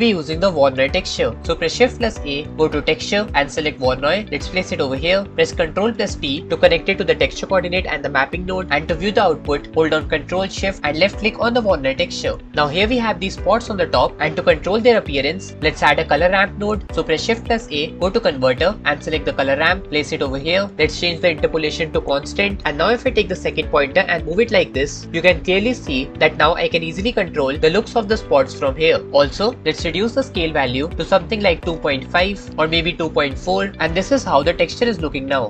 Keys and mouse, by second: 2.5 shift+a, 6.2 ctrl+t, 17.5 shift+a, 30.6-32.1 drag, 33.7-34.8 drag.